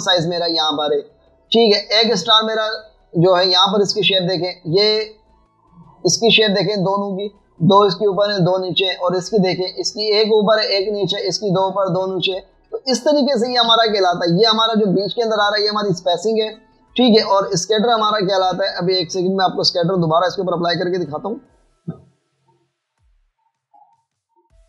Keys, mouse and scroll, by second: 2.7 alt+scroll up 1, 2.8 alt+scroll down 1, 3.9 alt+scroll up 1, 4.3 space, 13.7 space, 14.7 v, 15.3 alt+scroll up 1, 18.4 alt+scroll down 1, 18.6 space, 19.2 alt+scroll down 2, 19.3 alt+scroll up 1, 20.5 v, 24.2 double click.